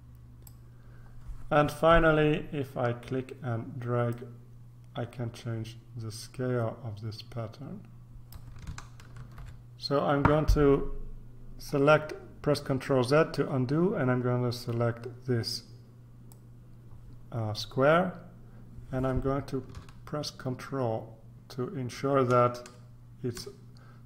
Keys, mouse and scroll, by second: 4.1-8.9 drag, 9.1 ctrl+z, 16.3-24.0 drag.